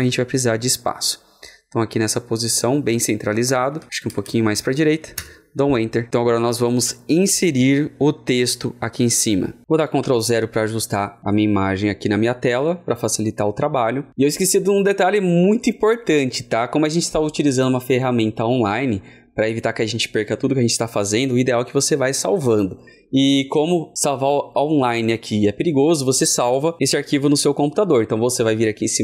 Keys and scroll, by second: 9.9 ctrl+0.